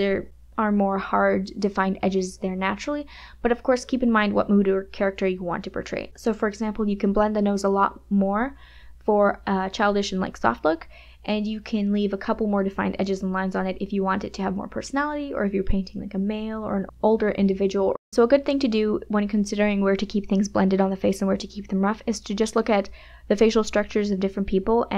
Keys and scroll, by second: 0.9 space, 9.5 KP_Add, 11.3 KP_Subtract, 12.4 ], 14.5 space, 15.5 space, 18.4 ].